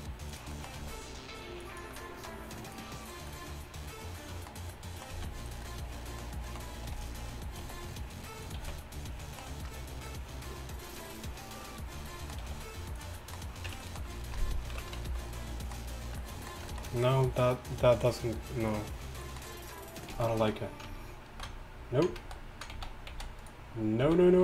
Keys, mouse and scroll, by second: 0.4 g, 5.2 z, 8.5 e, 8.6 z, 12.5 g, 13.8 Tab, 13.8 g, 14.7 alt+h, 15.1 a, 20.2 z, 21.6 ctrl+z, 22.4 ctrl+z, 23.2 z, 24.1 z.